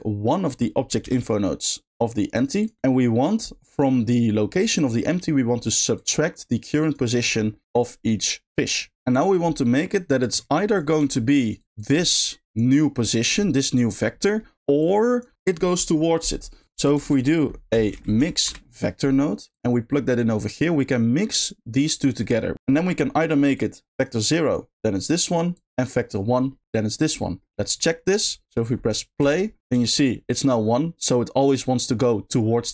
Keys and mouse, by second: 0.5 click, 1.0 shift+d, 2.3 click, 2.6 click, 4.0 click, 4.2-5.0 drag, 5.9 click, 6.0-6.9 drag, 8.4 click, 9.1 click, 9.7 middle click, 10.5 drag, 11.5 click, 11.7 click, 13.2 middle click, 14.5 middle click, 14.7 click, 16.6 click, 16.9 shift+a, 20.0 middle click, 20.8-21.4 drag, 22.2 middle click, 23.5 click, 25.6 click, 26.4 middle click, 27.2 middle click, 28.1 click, 29.2 space, 29.8 shift+middle click, 31.3 middle click.